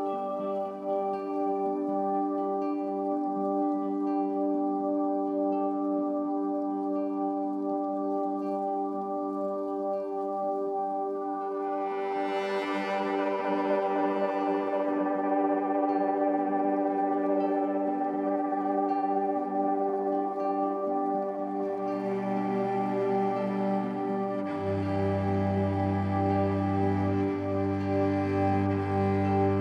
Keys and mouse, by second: 1.1-2.5 drag, 3.7-4.8 drag, 6.2 click, 7.4 click, 9.4 ctrl+z, 10.7 ctrl+z, 11.4 ctrl+z, 13.4-15.9 drag, 16.6-17.7 drag, 18.2-19.7 drag, 22.3 click, 23.2 alt+shift+click, 24.4-26.0 drag, 26.3-27.7 drag, 28.0-29.1 drag.